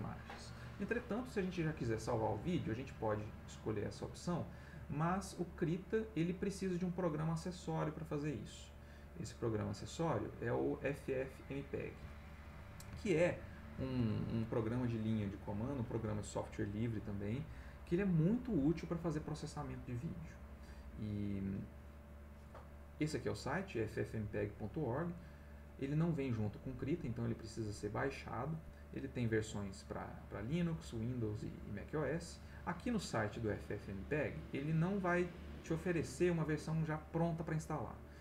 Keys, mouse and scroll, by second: 2.8 click, 3.4-5.1 drag, 9.8 click, 11.6 click, 13.1 alt+Tab, 25.3 click.